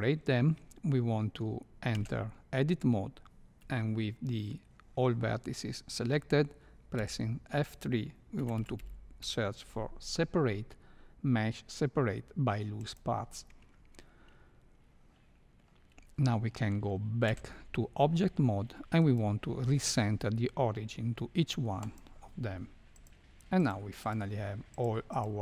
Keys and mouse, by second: 1.9 Tab, 7.0 F3, 17.2 Tab, 19.0-22.0 drag, 22.9 click, 23.6 click, 24.7 drag.